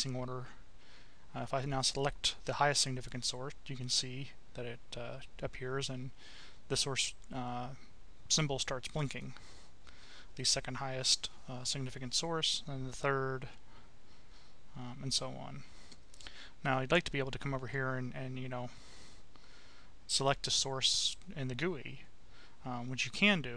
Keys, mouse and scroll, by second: 0.0-1.1 drag, 2.9 click, 8.9 click, 12.7 click, 17.7-18.9 drag, 20.1 Delete, 20.9 click, 22.1 click, 22.3 Delete.